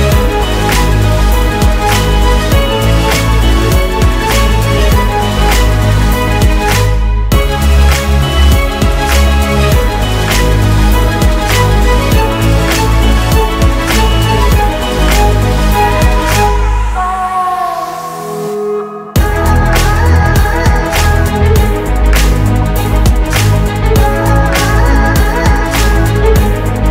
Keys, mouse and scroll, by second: 3.1 Return, 9.7 ctrl+shift+d, 10.1 shift+Delete, 11.9 F9, 20.3 space, 23.7 ctrl+d.